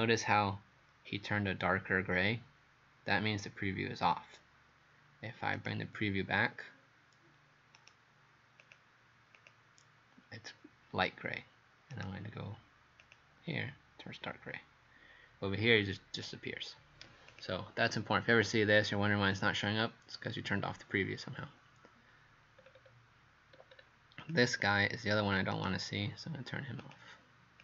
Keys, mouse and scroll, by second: 0.3 scroll up 1, 5.6 right click, 8.6 click, 11.9 right click, 13.0 click, 22.6-23.0 scroll down 4, 23.5 scroll up 3, 24.2 click, 25.6 right click, 26.8 click.